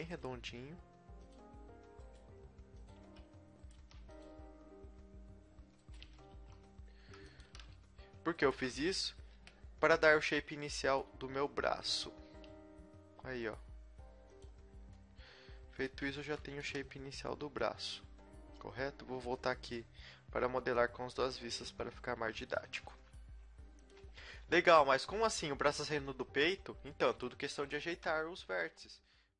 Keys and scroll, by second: 0.2 g, 2.2 g, 3.0 a, 3.7 g, 6.3 g, 7.5 a, 9.3 KP_1, 12.1 e, 16.7 KP_1, 16.8 KP_1, 23.0 a, 23.0 z, 23.2 b, 24.1 z, 25.3 z, 26.4 z, 26.9 z, 28.3 z, 28.5 g.